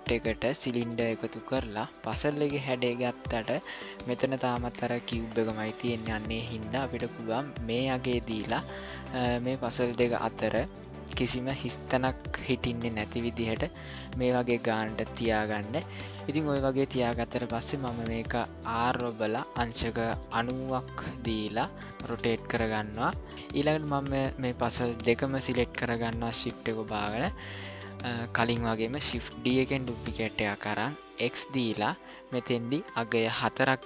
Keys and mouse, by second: 18.6 r, 23.6-24.2 shift+middle drag, 25.1 shift+click, 26.5-27.6 shift+middle drag, 29.4 shift+d.